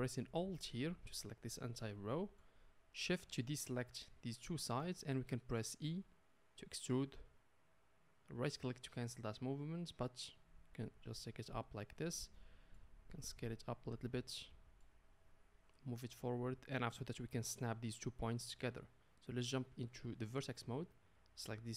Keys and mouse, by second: 0.9-3.3 alt+middle drag, 3.3 shift+click, 3.5-4.6 shift+middle drag, 4.6 shift+click, 4.6-9.5 shift+middle drag, 5.9 e, 9.5-14.1 drag, 13.1 s, 14.1-15.6 middle drag, 15.6-21.7 drag.